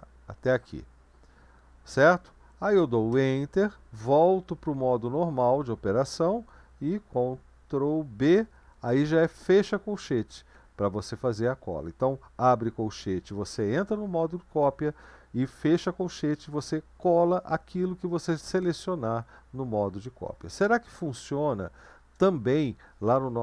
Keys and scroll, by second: 3.1 Return, 8.2 ctrl+b, 9.3 ], 21.0 BackSpace, 21.6-22.1 BackSpace.